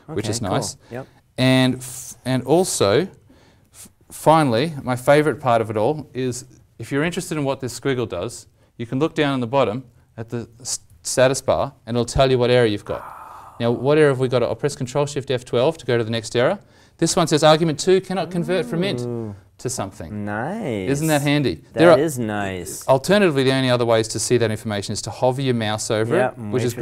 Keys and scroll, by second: 14.6 ctrl+shift+F12.